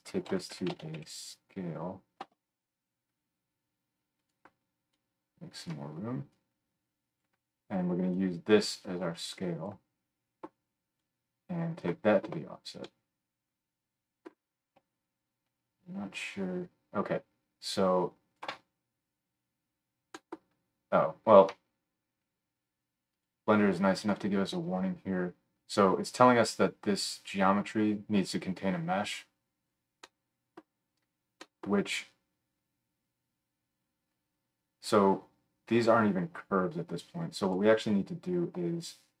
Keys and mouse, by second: 4.3 click, 21.2-31.4 middle drag, 31.7-36.8 drag, 31.7-37.6 middle drag, 31.7-36.8 right drag, 37.6-39.2 drag.